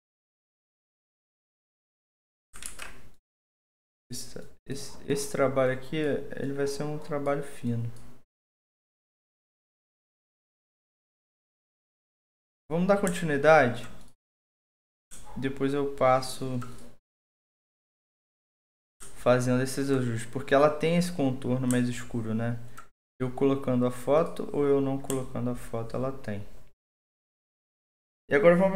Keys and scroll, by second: 2.7 ctrl+z.